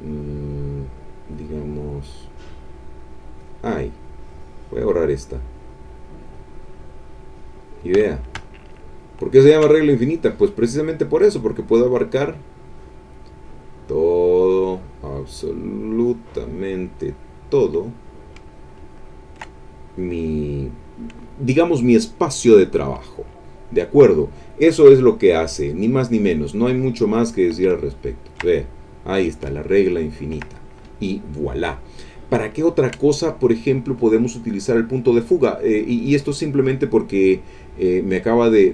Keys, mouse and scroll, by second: 3.4 click, 4.8 click, 6.2 click, 7.6 click, 8.0-9.7 middle drag, 10.1 click, 14.5-17.7 drag, 18.5-19.8 ctrl+middle drag, 26.0 click, 27.4 click, 27.8 ctrl+middle click, 29.6 ctrl+middle click, 31.9 click, 32.4 ctrl+middle click, 32.5 ctrl+middle click, 33.0 ctrl+middle click, 34.4 click, 36.1 click, 37.9 click.